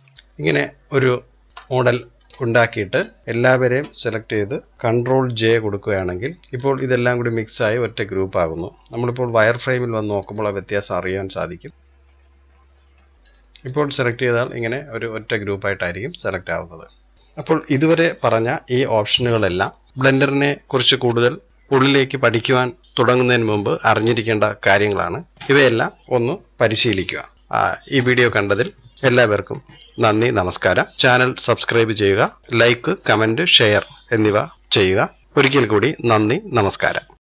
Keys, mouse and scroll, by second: 1.3 scroll up 1, 1.5 scroll down 2, 1.6 middle click, 2.1 click, 2.8 click, 3.6-6.3 middle drag, 6.3 ctrl+j, 6.4-8.4 middle drag, 8.4 scroll up 1, 8.5-8.9 scroll down 2, 8.9 z, 10.7-11.7 middle drag, 11.7 z, 12.4-13.1 middle drag, 13.5 click, 13.9-14.3 scroll down 2, 14.3-15.7 middle drag, 15.7-17.1 scroll up 1, 17.1 click.